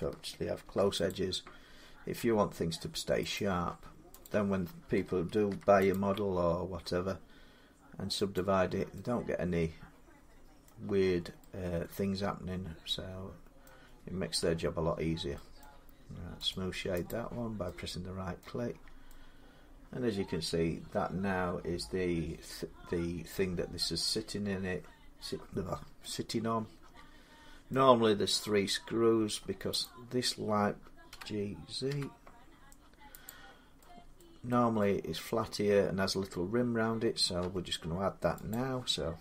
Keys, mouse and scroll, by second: 0.4 ctrl+r, 0.9 click, 3.2 click, 4.6 click, 5.1 ctrl+r, 5.7 click, 8.2 click, 10.4 middle click, 13.4 middle click, 14.3 Tab, 14.8 scroll down 4, 15.0 scroll, 15.4 middle click, 16.3 right click, 16.9 click, 18.2 middle click, 18.5 scroll down 4, 20.8 scroll up 4, 23.1 middle click, 27.5 middle click, 29.1 middle click, 29.6 click, 30.9-31.7 typing, 33.1 click, 34.0 middle click, 34.4 z, 34.6 middle click, 37.2 Tab, 38.3 click.